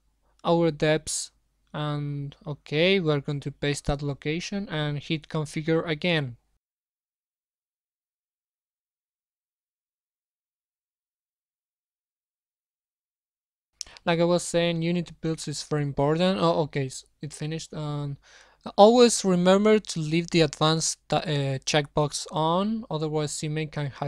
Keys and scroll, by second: 0.2 ctrl+c, 1.9 ctrl+v.